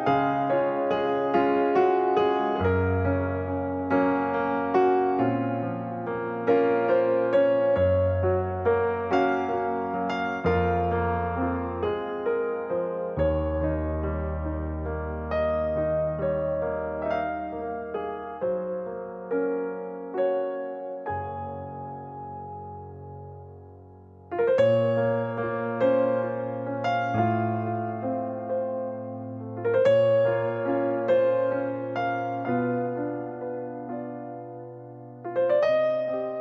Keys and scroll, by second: 0.8 space, 3.4 alt+r, 7.0-9.4 typing, 17.4 ctrl+z.